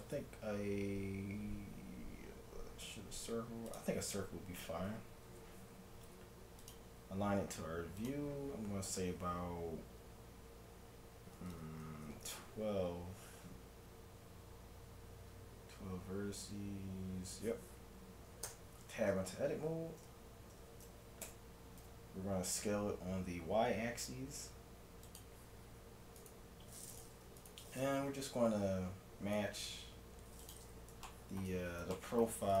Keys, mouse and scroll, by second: 5.3 F6, 18.5 Tab, 21.3 s, 26.2-29.3 right drag, 28.1 g, 30.8-32.6 middle drag.